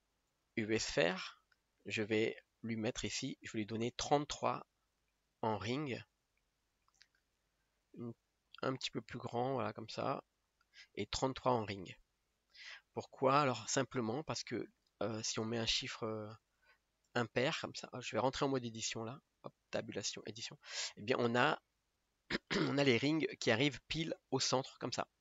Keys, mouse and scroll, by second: 0.3-5.1 drag, 5.1 KP_3, 8.7-11.7 drag, 12.3-13.3 scroll up 1, 13.3 KP_1, 14.4 click, 16.1 scroll up 2, 16.4 click, 17.6 click, 19.6-22.6 drag, 24.2 alt+click.